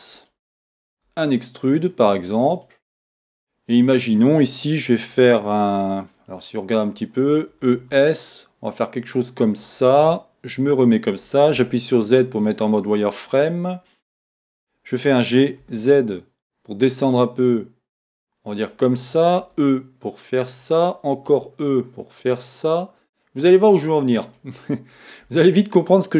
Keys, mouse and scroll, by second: 0.3 click, 2.6 click, 6.1 middle click, 7.5 e, 9.7 click, 10.6 KP_1, 11.6 z, 18.7 click, 20.7 click, 24.3 click, 25.3 e.